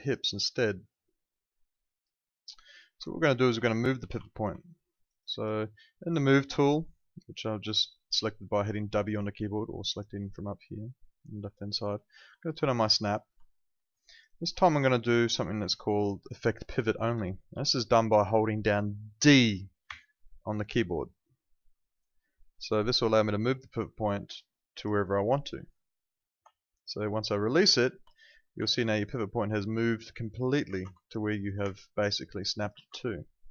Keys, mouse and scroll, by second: 2.9 Escape, 3.7 alt+click, 4.0 w, 4.6 alt+middle click, 4.9 alt+right click, 5.2 alt+click, 5.6 alt+middle click, 8.2 alt+click, 12.9 click, 13.4 alt+middle click, 13.8 alt+right click, 14.0 alt+click, 14.2 alt+right click, 14.9 alt+middle click, 15.7 alt+middle click, 17.1 alt+click, 19.8 d, 22.2 click, 24.8 d, 27.7 alt+click, 28.2 alt+middle click, 28.6 e, 29.4 click, 30.9 alt+click, 31.2 alt+right click, 31.6 w, 31.9 click, 33.2 ctrl+z.